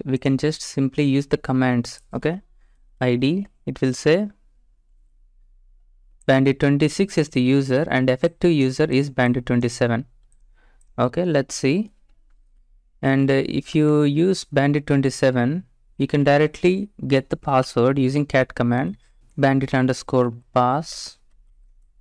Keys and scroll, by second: 3.1-3.8 typing, 13.7-14.4 typing, 15.7-17.7 typing, 18.7 typing, 20.3-22.0 typing.